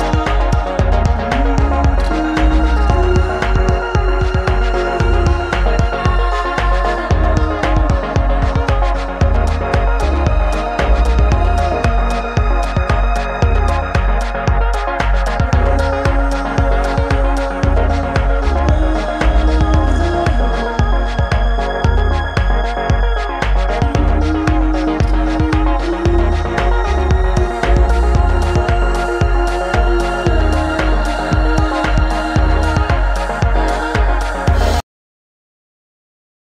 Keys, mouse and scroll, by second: 6.5 right click, 7.2-14.1 middle drag, 14.1-15.7 right drag, 15.7-20.1 middle drag, 20.1-21.1 right drag, 21.1-21.6 middle drag, 21.6-30.6 right drag, 23.7 s, 30.6 click, 30.6-34.3 middle drag, 34.3-36.4 right drag.